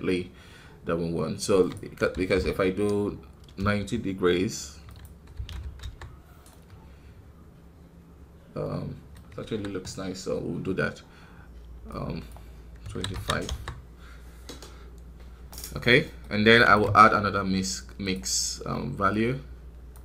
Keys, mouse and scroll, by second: 3.5-6.4 drag, 6.4-9.3 middle drag, 9.3 KP_1, 10.1-12.9 scroll up 2, 13.4-14.5 drag, 14.5 scroll down 1, 16.5 right click, 16.7 shift+d, 19.0-20.0 drag.